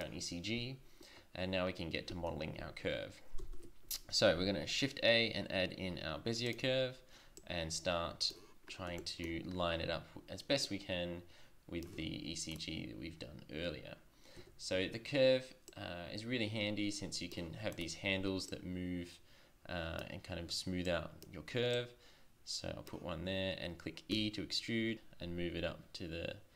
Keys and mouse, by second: 1.9 middle click, 3.3 shift+a, 7.3-7.7 drag, 11.9 Tab, 14.3 Tab, 14.7 Tab, 15.6 click, 19.9 click, 24.1 e.